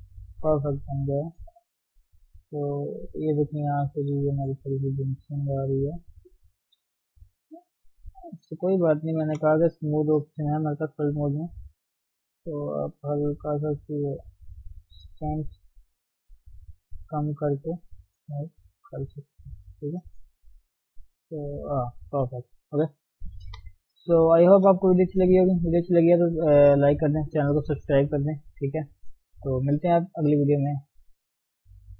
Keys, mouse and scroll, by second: 1.0-3.1 middle drag, 3.1-3.4 scroll up 1, 3.4 Tab, 4.1 click, 4.6-5.7 middle drag, 5.7 click, 7.4 g, 8.2 Tab, 9.2 shift+s, 9.5 f, 10.9-15.1 drag, 15.1 middle click, 15.6-17.4 drag, 17.4 scroll down 1, 17.4 middle click, 18.2-20.1 drag, 20.1-21.1 middle drag, 21.1 click, 21.8 middle click, 22.5-23.2 scroll down 2, 23.2 KP_3, 24.4 ctrl+Tab, 24.6-25.0 scroll down 3, 25.0-25.4 scroll up 1, 25.4 shift+middle click, 25.7 scroll up 1, 28.5 scroll down 2, 28.7 shift+middle click, 28.9-31.7 scroll up 3, 31.7 click.